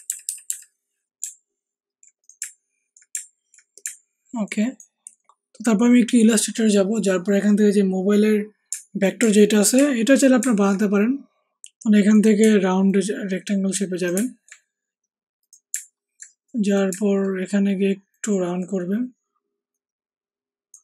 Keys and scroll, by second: 0.0 Down, 1.2 Down, 2.3 Down, 3.1 Down, 3.8 Down.